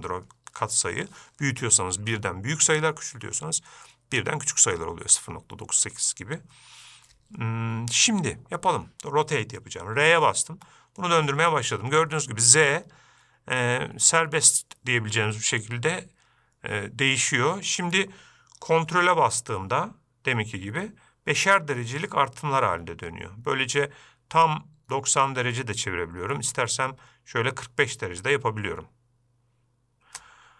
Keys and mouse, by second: 10.9 r.